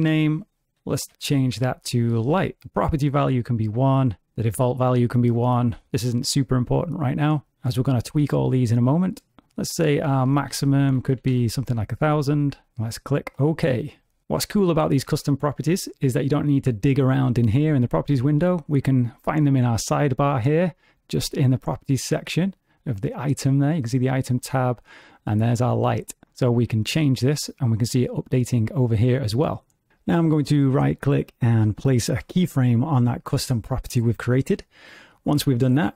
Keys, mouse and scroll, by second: 18.0 n, 26.2 click, 34.5 right click.